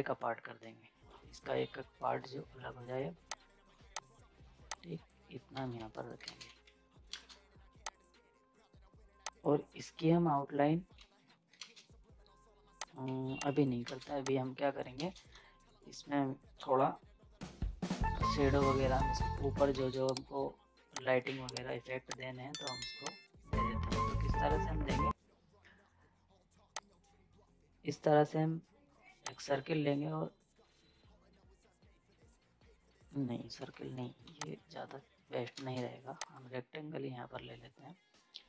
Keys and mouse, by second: 3.3 click, 5.5 ctrl+z, 5.9 right click, 6.4 ctrl+space, 6.4 z, 7.1 ctrl+space, 7.9 click, 10.9 z, 11.6 ctrl+space, 12.8 click, 13.1 z, 13.5 click, 13.8 ctrl+space, 14.0 z, 14.2 click, 15.0 ctrl+space, 15.4 z, 15.6 right click, 19.2 z, 19.3 right click, 21.0 click, 21.9 z, 22.1-23.9 drag, 23.9 ctrl+space, 26.8-34.2 drag, 34.2 z, 34.4 click, 35.6 ctrl+space, 36.2 click.